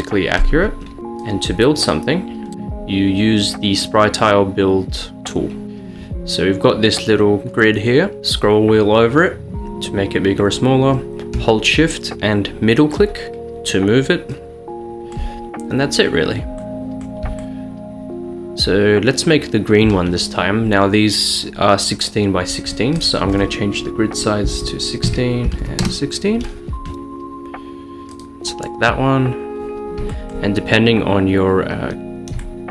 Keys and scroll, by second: 24.5-25.7 typing, 25.1 Tab, 25.9 Return.